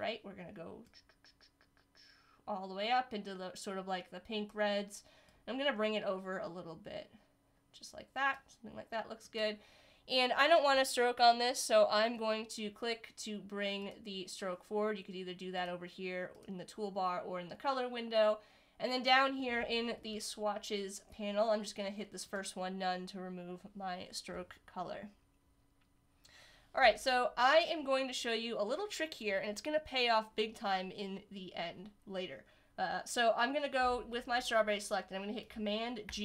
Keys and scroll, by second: 36.0 super+g.